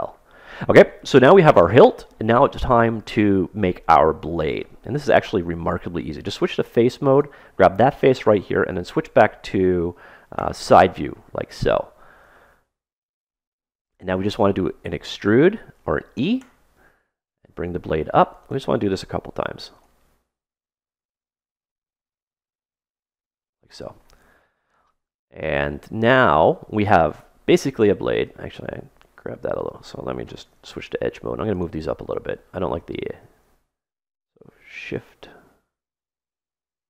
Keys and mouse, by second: 5.5 ctrl+Tab, 7.1 right click, 8.5 KP_1, 10.3 KP_3, 11.0-14.1 middle drag, 16.3 e, 18.5 e, 20.4 e, 21.5 e, 28.2-30.1 drag, 30.4 ctrl+Tab, 32.2-34.4 middle drag, 34.9-36.8 super+right drag.